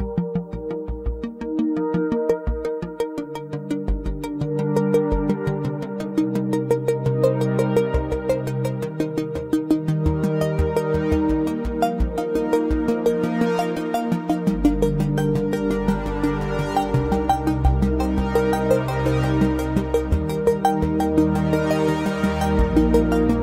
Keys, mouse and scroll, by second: 0.8 /, 1.5-2.9 middle drag, 2.9 Delete, 4.4 shift+a, 8.3-10.6 drag, 16.0-18.5 drag.